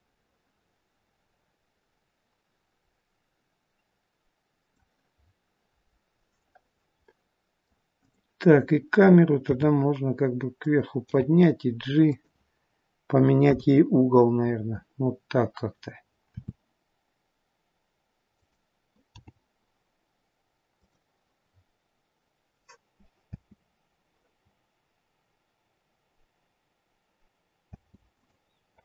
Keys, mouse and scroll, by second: 5.3-5.8 scroll up 1, 5.8-6.7 scroll down 1, 6.9 scroll down 3, 7.1 middle click, 8.0 click, 9.5 r, 13.5 KP_0, 16.4 r, 19.3 g, 21.6 scroll up 2, 22.4 scroll up 2, 23.4 space, 28.0 space, 28.3 click.